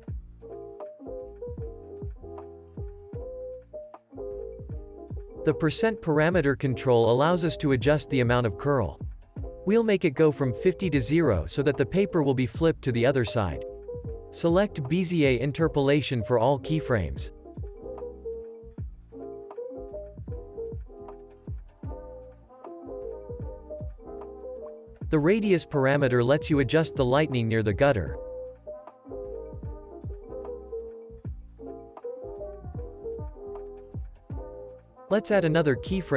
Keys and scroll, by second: 0.1 0, 7.1 0, 7.2 Return.